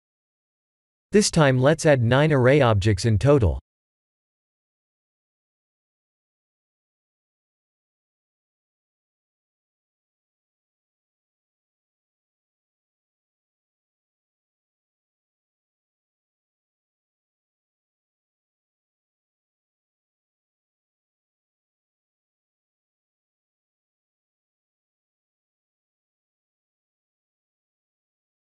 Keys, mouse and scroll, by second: 1.2 click, 2.3 click, 3.5 shift+a, 10.8 click, 12.9 click, 13.6 click, 16.2 click, 17.2 click, 17.9 click, 18.6 click, 19.6 click, 24.0 ctrl+a.